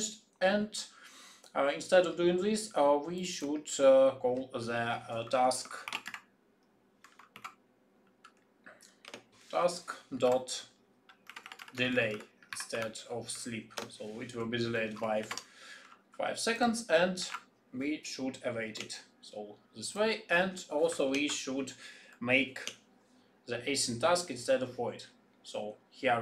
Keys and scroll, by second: 21.0 alt+Return.